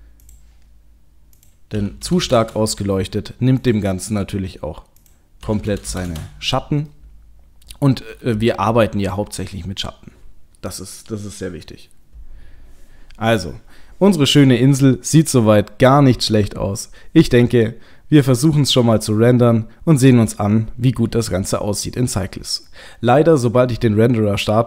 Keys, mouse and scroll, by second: 0.2 click, 1.4 click, 3.6 click, 3.6 KP_0, 5.0 click, 5.9 KP_0, 6.9 middle click, 7.9 middle click, 8.3 KP_0.